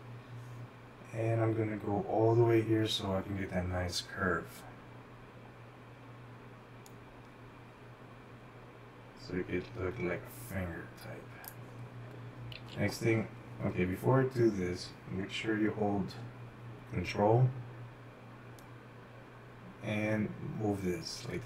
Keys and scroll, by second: 15.1 ctrl+z.